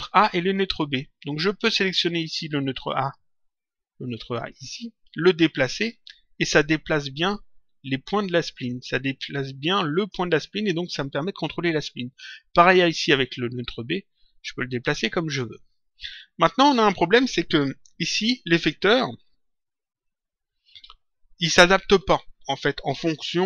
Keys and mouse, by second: 2.9 click, 4.3 click, 6.0 click, 12.5 click, 13.9 click.